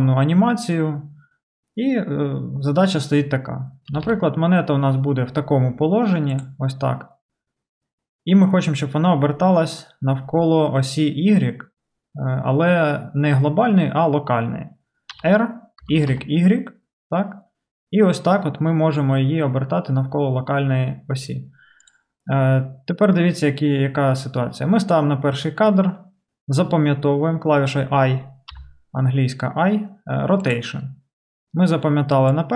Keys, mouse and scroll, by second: 3.9 r, 28.5 i, 32.3-32.5 drag.